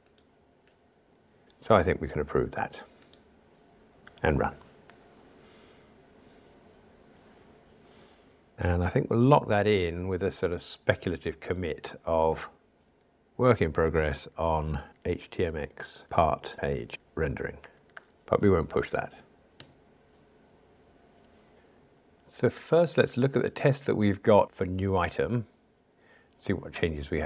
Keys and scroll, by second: 3.6 super+F11, 4.2 ctrl+r, 9.3 super+k.